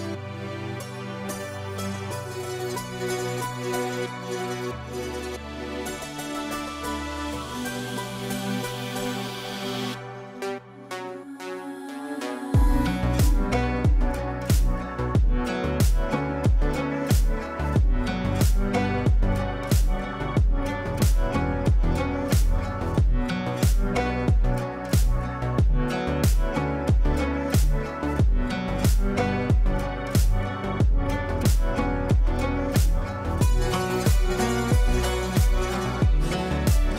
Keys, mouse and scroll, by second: 4.9 ctrl+z, 6.1 ctrl+z, 7.6-10.5 drag, 10.2 right click, 10.2 right click, 11.1 click, 12.0 ctrl+a, 12.9-13.8 typing, 14.9-16.0 typing, 16.7 ctrl+q, 18.2 Down, 20.4-21.6 drag, 23.7 shift+click, 24.4 c, 24.9-28.0 drag, 31.3 shift+p, 33.5-34.6 typing, 35.4 ctrl+space.